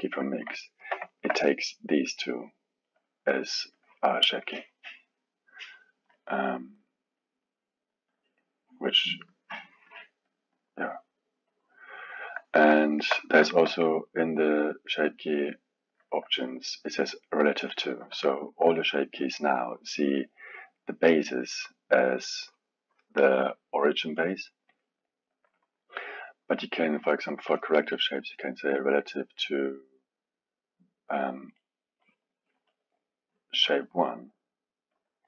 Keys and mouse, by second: 0.0-0.6 drag, 0.6-2.3 ctrl+middle drag, 2.3 click, 3.7-9.3 drag, 9.9 click, 10.3 click, 10.5 click, 11.5-12.8 drag, 12.8-15.8 alt+middle drag, 18.2-21.2 alt+middle drag, 21.5 drag, 27.0-28.7 drag, 29.4-35.2 drag.